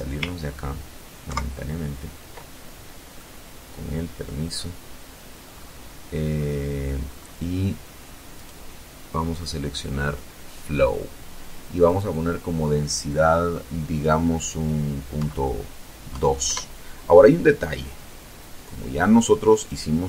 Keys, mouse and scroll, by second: 1.1-2.3 drag, 2.4-2.8 scroll up 2, 3.4-3.8 scroll down 2, 4.3-4.6 scroll up 2, 5.1 scroll down 1, 6.2 right click, 9.8 click, 13.0 KP_Decimal, 13.9 KP_2, 14.4 KP_Enter, 16.1-16.5 scroll up 2, 17.4 right click, 18.6-19.0 scroll down 2, 19.6 scroll down 2.